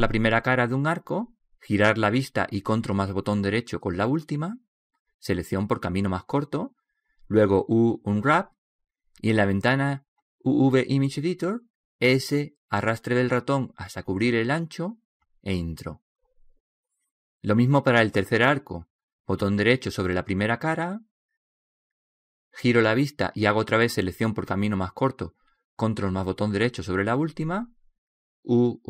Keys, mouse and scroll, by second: 0.7 right click, 2.6 middle click, 3.8 right click, 9.3 u, 11.1-16.1 drag, 17.7-20.0 middle drag, 20.0 right click, 20.9 middle click, 22.1 middle click.